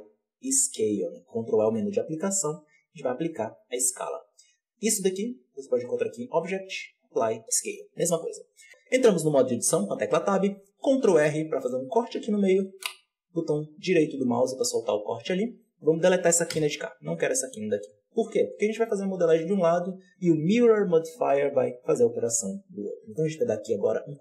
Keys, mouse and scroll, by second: 1.5 ctrl+a, 4.9-7.4 drag, 8.5 Tab, 10.7 ctrl+r, 15.4-16.4 drag, 16.4 Delete, 18.7-21.7 drag.